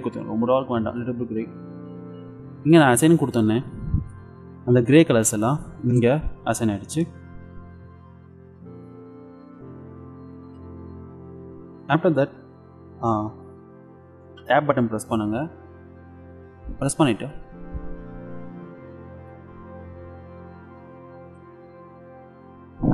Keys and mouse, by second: 3.4-4.8 drag, 4.8 Tab, 5.0 click, 6.6 Tab, 14.5 Tab, 16.6-18.2 middle drag, 18.6 middle click, 19.9 KP_5, 21.2 KP_5, 22.1-22.9 middle drag.